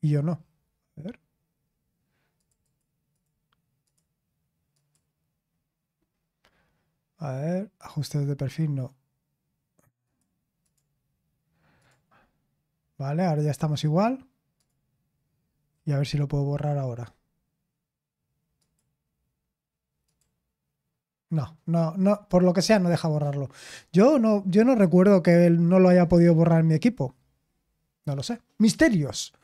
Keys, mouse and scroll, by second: 2.3 click, 2.6 click, 3.1 click, 3.8 click, 4.2 click, 4.7 click, 6.3-7.2 scroll up 1, 10.0 click, 10.6 click, 11.8 click, 14.5 click, 18.6 click, 20.0 click, 22.2 click, 24.9 click.